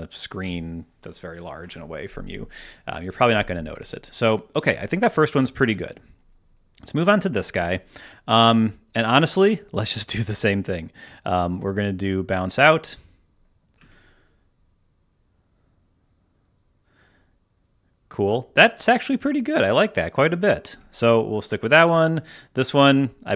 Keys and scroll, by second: 4.6 space, 13.7 space, 14.5 space, 20.6 space.